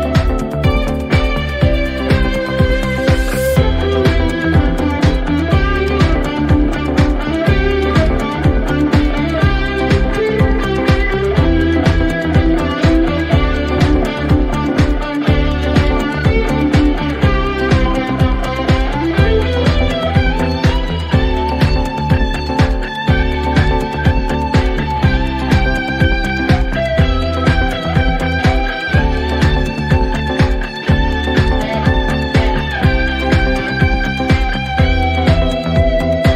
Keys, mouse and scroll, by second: 2.0-4.0 typing, 5.3 click, 5.4 click, 6.5 click, 10.0-12.6 drag, 12.6 click, 15.3 click, 18.1 click, 18.9-20.5 typing, 22.5 click, 22.7 click, 26.3 click, 26.7-27.5 typing, 27.8 Return, 31.0 click, 31.6-33.8 typing, 36.1 click, 36.2 click.